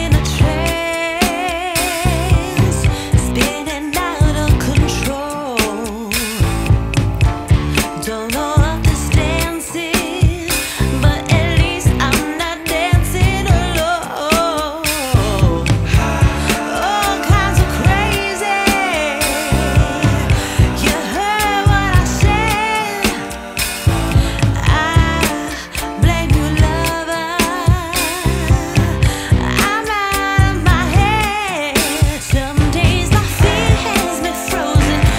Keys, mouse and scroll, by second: 1.6 ctrl+s, 3.2 shift+d, 4.8-8.6 drag, 8.6 ctrl+s, 9.5 KP_0, 10.3-10.6 scroll up 3, 11.4 ctrl+s, 12.2 scroll down 2, 14.3 shift+click, 16.0 g, 20.8 ctrl+s, 22.7 scroll up 1, 23.5 scroll up 1, 25.2 click, 27.5 click, 28.3 scroll up 2, 30.4 ctrl+s, 33.0 scroll down 2, 34.8-35.1 drag.